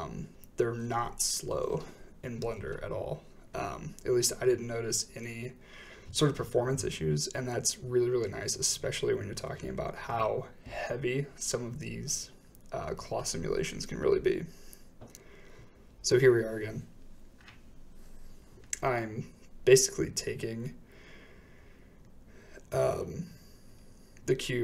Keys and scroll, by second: 1.2 typing, 1.3 Return, 2.9-3.7 typing, 5.4 typing, 5.7 Return, 7.7-8.1 typing, 8.2 Return, 10.6 typing, 10.7 Return, 12.2 shift+Left, 21.7-22.4 typing, 24.0-24.6 typing.